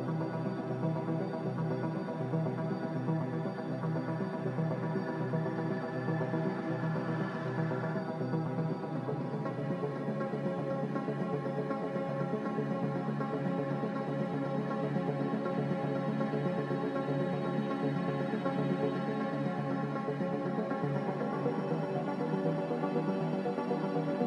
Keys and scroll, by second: 3.2 1, 3.3 0, 3.6 Return, 18.5 z.